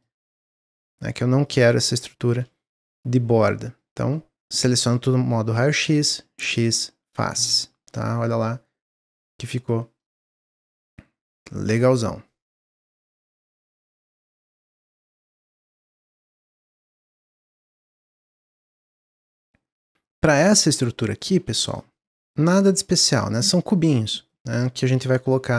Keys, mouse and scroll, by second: 1.9 shift+click, 2.6-5.6 middle drag, 6.1 x, 7.5 Tab, 7.9-11.6 middle drag, 11.6 click, 11.9 scroll down 1, 12.2-15.3 middle drag, 16.2-17.0 middle drag, 17.0-17.4 scroll down 2, 17.4 shift+middle click, 18.4 click, 18.8-20.5 middle drag, 20.5-20.9 scroll up 2, 20.9-21.6 middle drag, 21.6 click, 21.9 shift+middle drag, 22.2-22.7 shift+scroll up 1, 22.7-25.5 shift+middle drag.